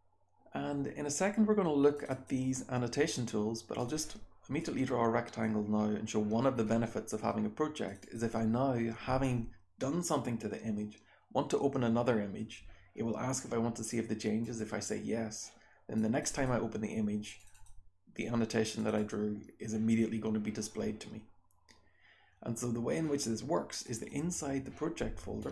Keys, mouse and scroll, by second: 1.9 click, 2.0-2.5 drag, 3.7 click, 4.6 click, 7.8 click, 15.9 click, 16.2 click, 17.3 click, 17.4 click, 18.7 click, 18.9-19.3 drag.